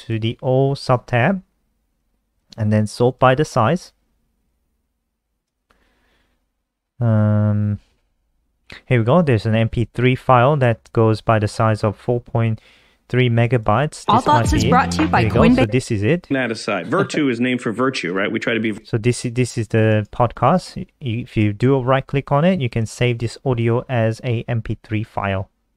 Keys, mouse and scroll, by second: 3.4 click, 4.4 click, 13.5 click, 15.6 click, 19.8 right click, 22.6 click.